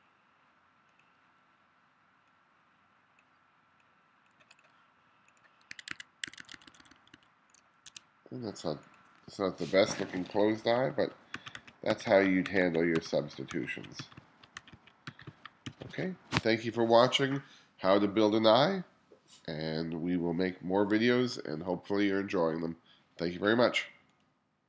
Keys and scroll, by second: 5.8 1, 7.9 2, 9.8-15.7 typing.